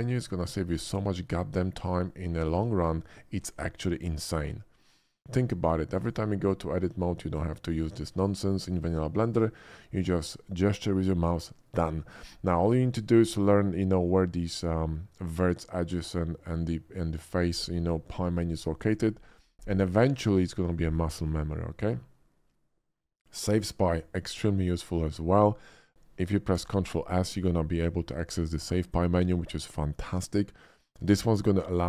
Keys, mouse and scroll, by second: 23.8 click, 23.8 typing, 25.3 click, 26.5 ctrl+s.